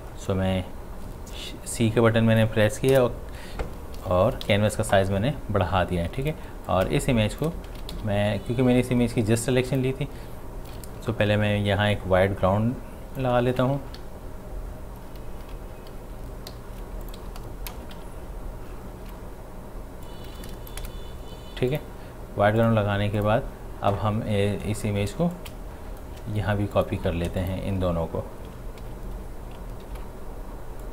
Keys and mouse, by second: 0.3-2.9 drag, 2.9 Return, 4.5 v, 6.3 click, 7.7 ctrl+z, 7.9 v, 9.7 click, 11.1 typing, 11.9-13.4 drag, 13.4-14.4 typing, 16.5-18.0 typing, 17.0 click, 20.1 click, 20.8 Return, 21.7 click, 24.8 shift+click, 25.4-26.8 alt+drag, 27.4 shift+click, 28.8 ctrl+j, 29.9 ctrl+t, 30.8-30.9 drag.